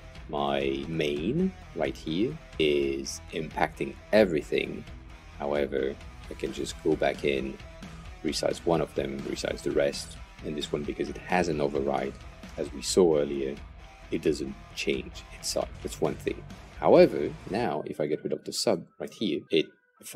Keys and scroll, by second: 18.9 Return, 19.4 BackSpace.